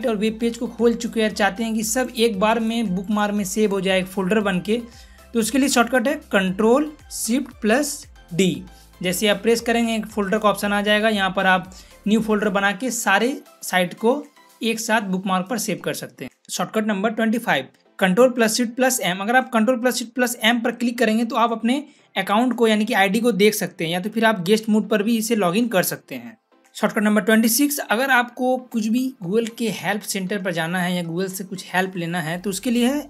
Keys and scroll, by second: 8.1 ctrl+shift+d, 20.9 ctrl+shift+m.